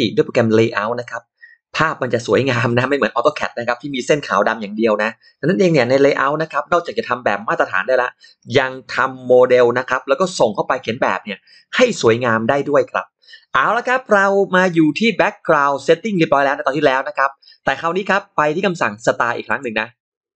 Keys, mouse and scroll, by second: 19.3 click.